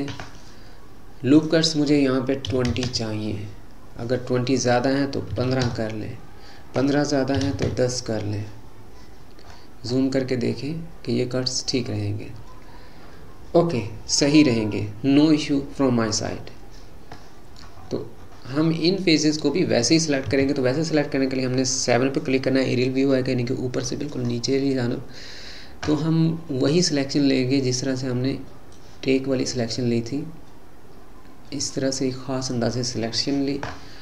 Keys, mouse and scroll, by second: 1.3-4.4 drag, 4.6-9.5 drag, 9.5-10.3 scroll up 8, 17.2 middle click, 17.9-18.7 scroll down 8, 18.7-20.3 middle drag, 20.3 KP_7, 24.3-25.3 scroll up 4, 25.3-26.3 scroll down 2, 28.7 click.